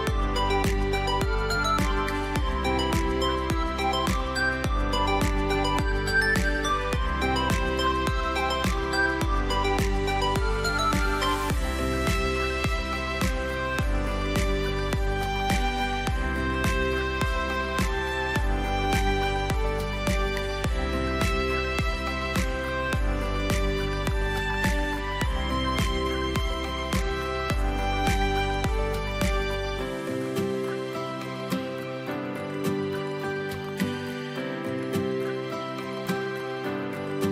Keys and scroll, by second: 14.4 ctrl+alt+b, 15.5 w, 15.6 Return, 19.0 v, 20.4 F5, 21.9 ctrl+x, 23.1 ctrl+b, 24.0 space, 34.2 a, 36.1 v, 36.7 space.